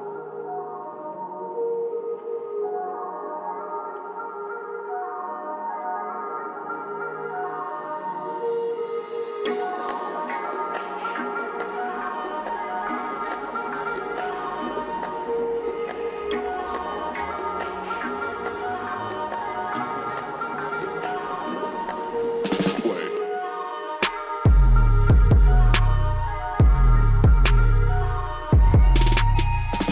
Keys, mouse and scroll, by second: 1.6 click, 4.0 scroll up 1, 5.2 click, 5.9 Delete, 6.2 scroll down 1, 7.4-9.4 drag, 9.4 Delete, 9.8 click, 11.0 scroll up 1, 11.7 scroll down 1, 12.4 scroll up 1, 13.5 scroll down 1, 13.9 scroll up 1, 15.4-19.7 drag, 19.7 scroll down 1, 20.7 click, 21.5 scroll up 1, 22.1 click, 22.6 Delete, 22.9 scroll down 1, 23.5 click, 24.0 Delete, 24.7-29.9 drag.